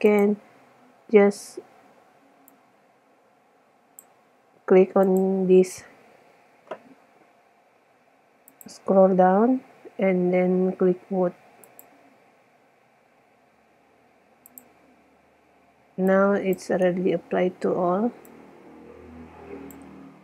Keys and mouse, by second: 2.7 click, 4.0 click, 4.4 click, 5.3-7.0 drag, 8.9 click, 18.1 middle click, 18.5 middle click, 18.6-19.7 middle drag.